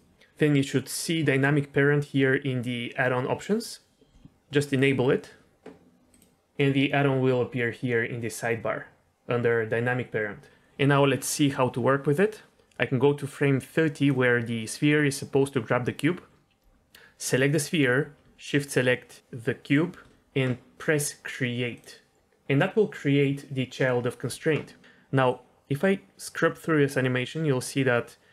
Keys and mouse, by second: 12.5-14.0 drag, 17.3 click, 19.6 shift+click, 21.7 click, 25.2-28.3 drag.